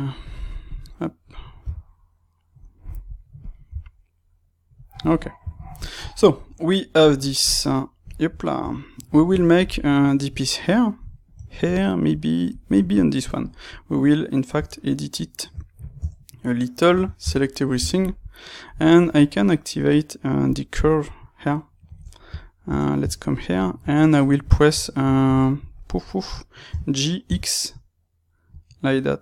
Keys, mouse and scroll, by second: 0.1 click, 0.6 click, 1.5 g, 2.5 click, 3.3 click, 3.7 g, 4.8 click, 5.0-12.4 middle drag, 8.5 Tab, 12.4 click, 12.8-20.5 ctrl+middle drag, 14.5 Tab, 15.9 Tab, 17.1 a, 20.5 click, 21.1-29.2 middle drag, 22.6 Tab, 26.7 g.